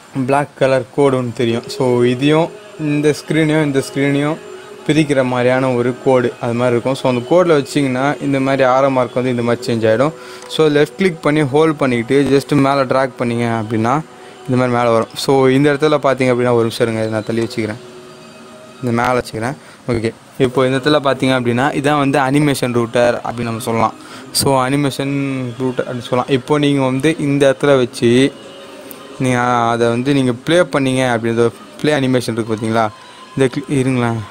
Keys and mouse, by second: 10.5-15.0 drag, 17.7-22.0 drag, 28.1 click.